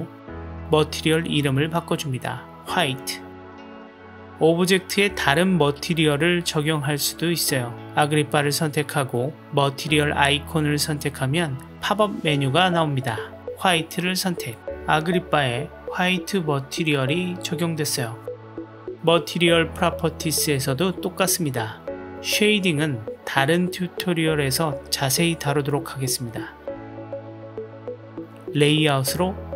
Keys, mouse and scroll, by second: 0.7-3.2 drag, 6.8 click, 11.4-13.9 drag, 20.3 click, 21.9-23.0 drag, 24.7 click, 26.3 click.